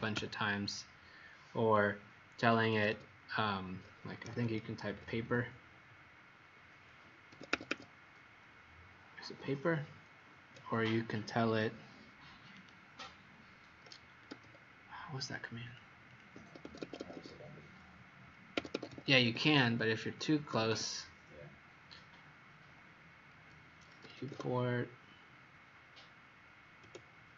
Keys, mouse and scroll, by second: 1.7 middle click, 2.6 Escape, 2.6 Escape, 2.9 Escape, 3.9-5.3 typing, 7.2 Escape, 7.4 Escape, 7.6 Escape, 12.5 right click, 14.2 Escape, 16.1 click, 16.3 Escape, 16.6 Escape, 18.5 Escape, 18.7 Escape, 18.8 Escape, 19.0 Escape, 19.2 Escape, 19.9 click, 20.0 click, 20.5 click, 20.5 e, 23.5-24.7 typing, 26.8 BackSpace.